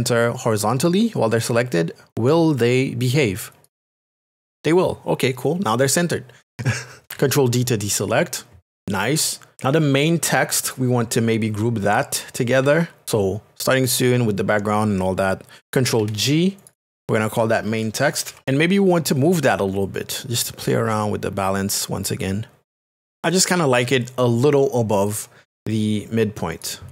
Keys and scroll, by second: 16.6 ctrl+g, 18.1 shift+m.